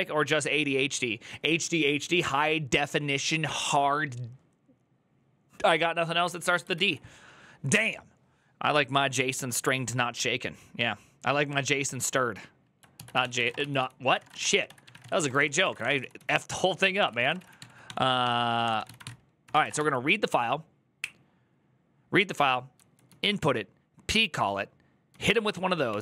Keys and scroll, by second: 6.5 alt++, 12.9-20.0 typing, 25.0-26.0 typing.